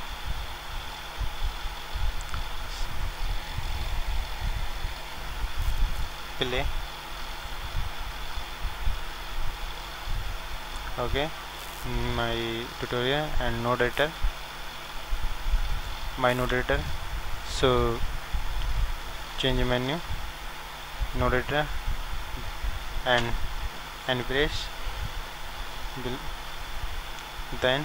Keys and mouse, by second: 2.1-3.9 drag, 6.3-10.6 drag, 10.8-14.4 drag, 14.5-27.8 drag.